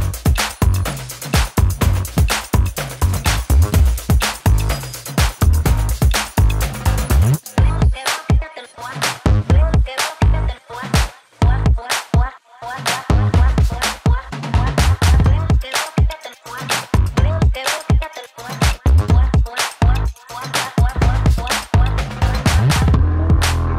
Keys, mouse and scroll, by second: 2.7-5.4 drag, 10.2-12.5 shift+drag, 13.1-17.4 typing, 17.7 Return, 19.1 click, 21.9-23.7 drag.